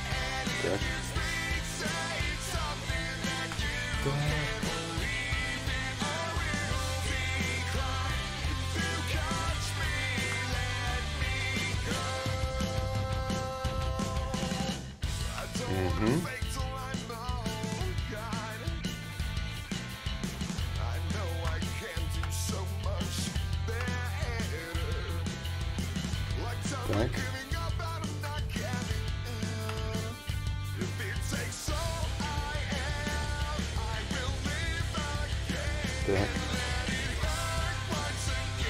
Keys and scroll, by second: 18.3 s, 24.6 d, 31.4 ctrl+z, 31.8 s.